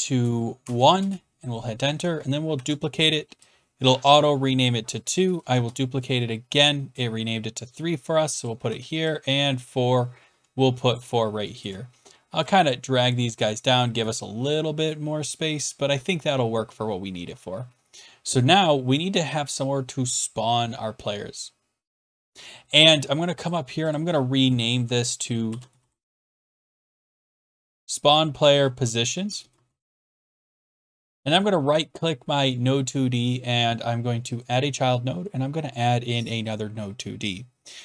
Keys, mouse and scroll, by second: 0.6 1, 1.0 Return, 2.5 ctrl+d, 5.1 shift+click, 5.5 ctrl+d, 8.4 click, 8.6 ctrl+d, 10.9 shift+click, 11.6 shift+click, 13.4 shift+click, 14.0-15.3 scroll down 13, 15.3-15.9 scroll down 1, 15.9 scroll down 2, 23.5 click, 23.9 click, 25.4-30.5 typing, 31.5 click, 32.4 right click, 32.4 p, 32.4 BackSpace, 34.4 click, 36.4 click, 36.5 click.